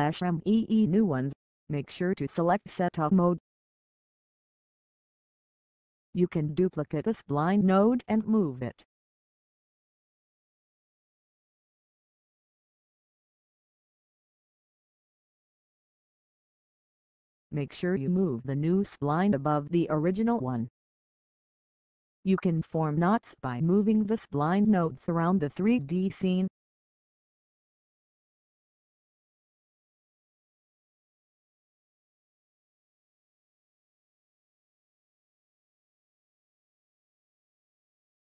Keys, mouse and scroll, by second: 3.2-3.9 scroll down 1, 4.7-5.1 scroll up 1, 6.7 right click, 11.4 click, 26.6 click, 37.7 Pause.